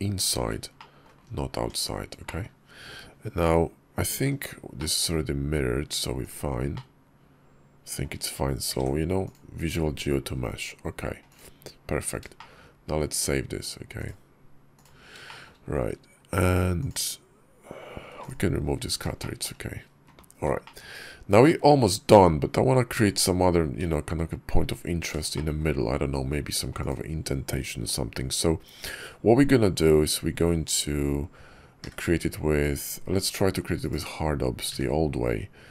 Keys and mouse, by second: 0.6 click, 1.6 Tab, 2.1 click, 2.5 KP_5, 3.3 click, 4.6 click, 6.0 click, 6.6-7.9 middle drag, 8.5 ctrl+a, 9.7 `, 10.5 KP_5, 12.2 shift+click, 13.9 click, 15.1 shift+click, 16.7 click, 18.0 x, 19.1 shift+click, 20.5 shift+click, 25.2 shift+click, 26.6 click, 31.7 d, 34.5 d.